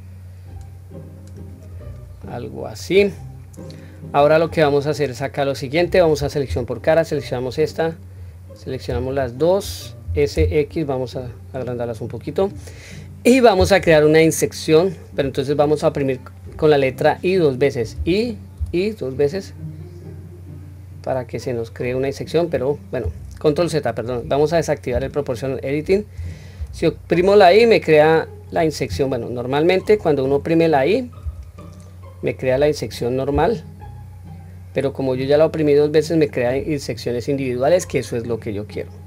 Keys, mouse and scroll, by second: 1.7-2.8 scroll down 2, 2.2 middle click, 3.1-3.6 scroll up 1, 3.7-4.5 scroll down 1, 4.5 middle click, 6.4 3, 6.7 click, 8.1 click, 9.1 shift+click, 10.0 s.